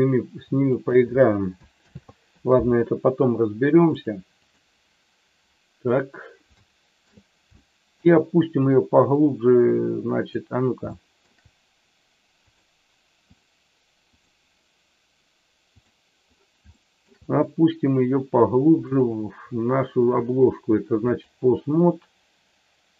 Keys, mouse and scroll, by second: 0.7 click, 1.9 ctrl+z, 4.1 click, 6.6 shift+middle click, 7.6 shift+middle click, 9.2-10.3 drag, 11.0 shift+middle click, 12.5 click, 16.6 shift+middle click, 18.8-21.2 drag.